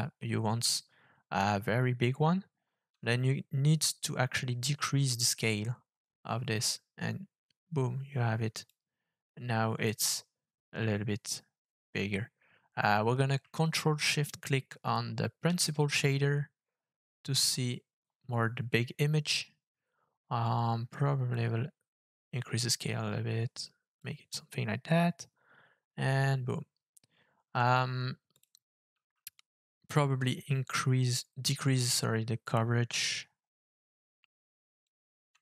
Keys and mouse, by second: 4.1-8.7 drag, 15.5 ctrl+shift+click, 21.3-24.0 drag, 28.3 ctrl+shift+click, 30.3-34.8 shift+drag.